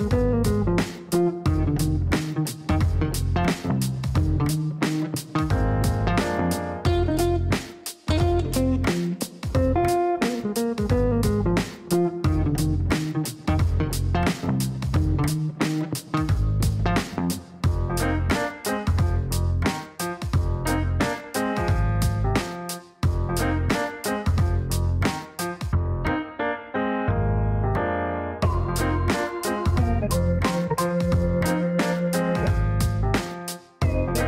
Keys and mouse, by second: 1.1 click, 1.2 click, 1.4 click, 2.4 KP_3, 2.5 KP_0, 4.8 click, 18.1 click, 18.3 click, 20.9 click, 21.7 click, 23.0-24.8 typing, 25.5 click, 26.1 click, 31.7-34.2 typing.